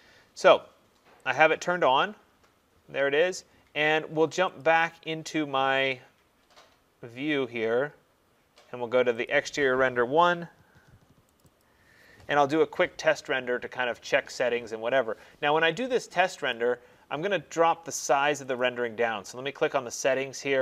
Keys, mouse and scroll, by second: 1.4 click, 6.0 click, 9.3 click, 11.5 click, 11.7 click, 16.6 click, 18.6 click.